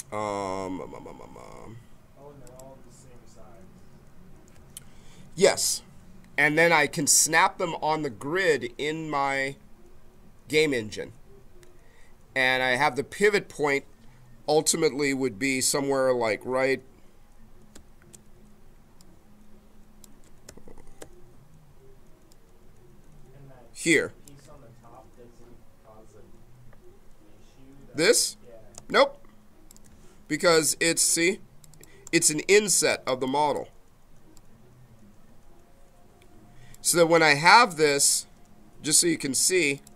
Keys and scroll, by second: 18.2 v, 28.7 space.